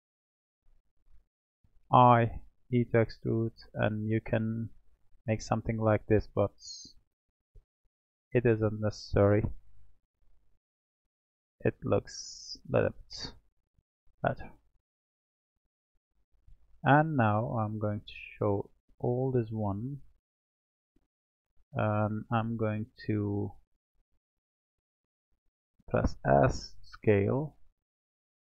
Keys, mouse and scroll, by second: 1.8 i, 5.8-13.0 drag, 13.7-15.3 middle drag, 15.3 click, 15.9-17.7 middle drag, 17.7 click, 18.3 click, 19.0-19.5 scroll down 4, 19.5-21.1 middle drag, 21.1-22.3 scroll down 3, 22.3 Tab, 23.4-25.0 scroll up 2, 25.0 s, 27.7 click.